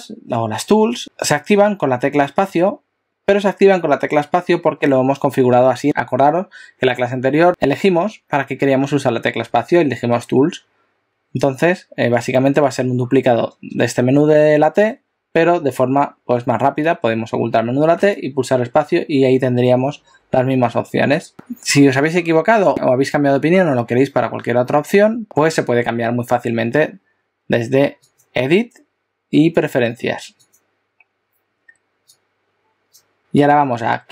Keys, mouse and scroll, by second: 2.5 space, 17.9 space, 28.1 click.